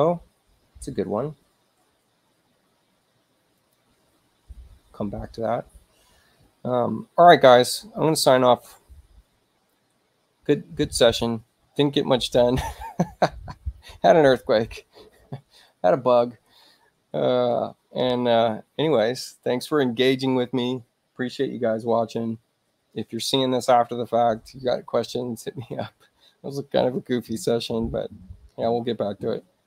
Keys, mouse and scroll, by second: 3.6 click.